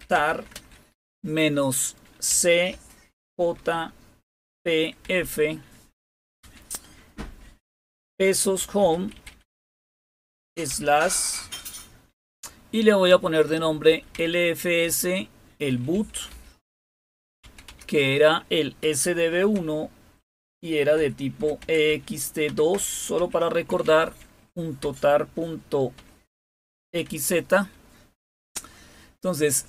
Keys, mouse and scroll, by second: 0.0-0.9 typing, 2.2-3.2 typing, 4.4-4.9 typing, 6.3 typing, 7.8-10.6 typing, 13.0-24.7 typing, 26.8 typing.